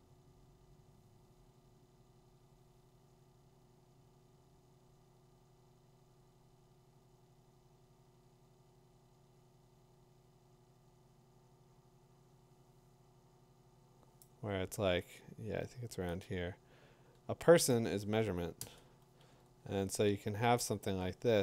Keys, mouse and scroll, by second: 14.2 click, 17.7 click, 18.6 Return, 20.7 middle click, 20.8 middle click.